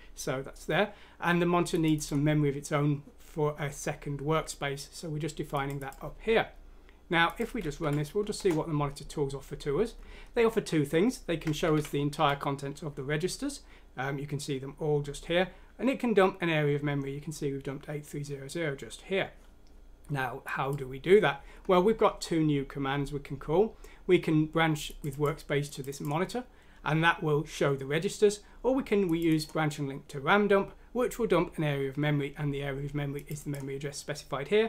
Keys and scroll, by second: 7.8 F6, 8.3 Return, 11.4-12.6 typing.